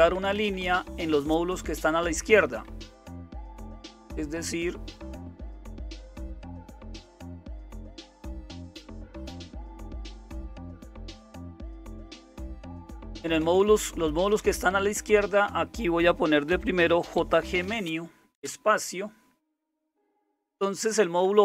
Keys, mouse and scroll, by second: 0.0 Up, 0.1 Up, 0.3 Up, 0.5-3.3 Up, 9.4-12.4 Up, 12.6 Down, 12.8 Down, 13.0 Down, 13.1 Down, 13.3 Down, 14.3 Up, 14.3 Down, 14.5 Right, 14.7 Right, 14.8 Right, 15.0 Right, 15.2 Right, 16.5 Right, 16.6-18.8 typing.